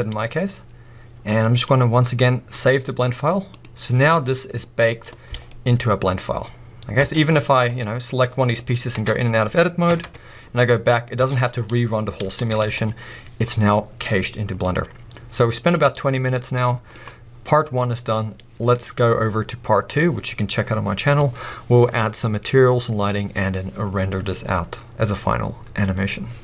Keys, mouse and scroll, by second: 4.5-5.2 scroll up 2, 5.2-7.0 scroll down 2, 7.0-8.1 scroll down 1, 8.5 middle click, 9.9 b, 10.0 Tab, 14.6 scroll up 2, 15.0-26.4 middle drag.